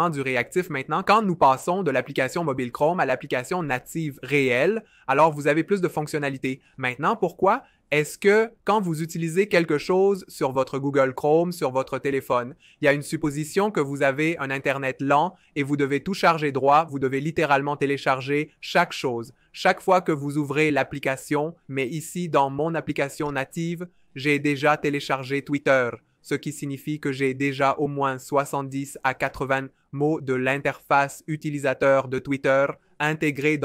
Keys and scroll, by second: 23.0 a.